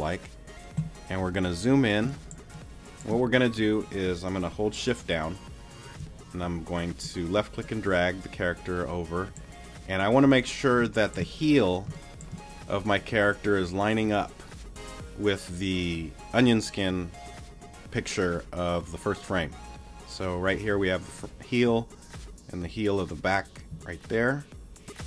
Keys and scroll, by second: 2.0 space, 10.8 space.